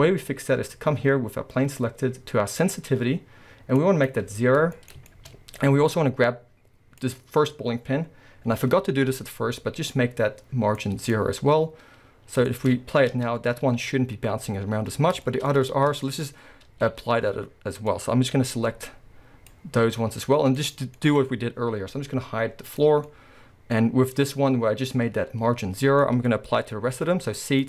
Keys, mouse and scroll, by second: 1.3-2.6 scroll down 2, 2.6 click, 3.8-4.8 drag, 4.4 scroll down 1, 4.8-7.0 shift+middle drag, 5.3-7.0 scroll up 2, 7.0 click, 10.8-12.5 drag, 11.5-12.5 scroll up 2, 12.5-20.7 shift+middle drag, 13.1 space, 13.8 scroll up 2, 15.7 space, 18.4 c, 20.7 right click, 20.9-22.7 middle drag, 22.7 click, 23.1-24.2 middle drag, 23.8-24.2 scroll up 2, 24.2 click, 26.0-27.6 middle drag, 26.3-27.0 scroll down 2, 27.0 c.